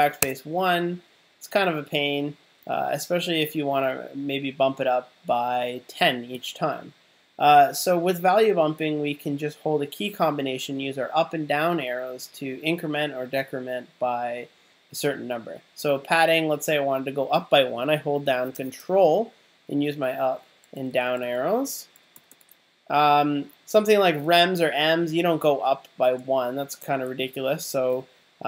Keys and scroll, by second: 0.2 1, 2.5 BackSpace, 2.6 0, 19.9 ctrl+Up, 20.8 ctrl+Down, 22.0 ctrl+Up, 26.2 ctrl+Up, 26.8 ctrl+Down.